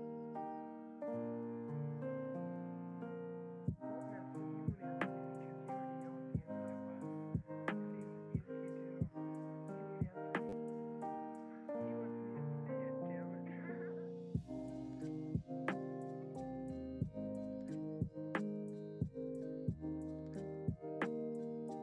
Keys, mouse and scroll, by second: 1.1 ctrl+t, 8.3-11.5 KP_4, 11.7 KP_4, 12.5 click, 13.5-19.1 drag.